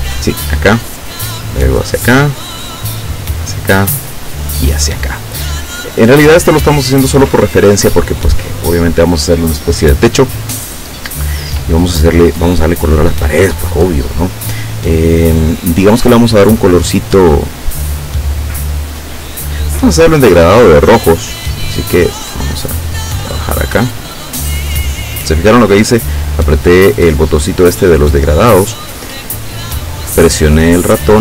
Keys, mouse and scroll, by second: 0.2 click, 2.0 click, 3.4 click, 4.5 click, 11.6 click, 12.6 click, 21.2 click, 22.8-25.4 drag.